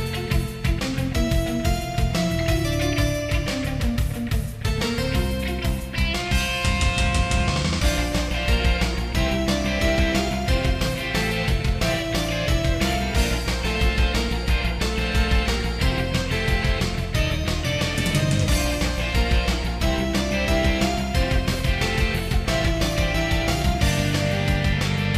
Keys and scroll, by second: 0.2 ctrl+z, 0.7 ctrl+z, 3.2 ctrl+z, 3.6 ctrl+z, 4.9 ctrl+z, 5.9 ctrl+z, 6.2 ctrl+z, 6.9 ctrl+z, 7.4 ctrl+z, 9.3 ctrl+z, 9.8 ctrl+z, 10.8 ctrl+z, 13.0 ctrl+z, 14.1 ctrl+z, 15.5 ctrl+z, 16.1 ctrl+z, 18.8 ctrl+z, 22.0 ctrl+z, 22.8 ctrl+z, 24.2 ctrl+z, 24.7 ctrl+z, 25.0 ctrl+s.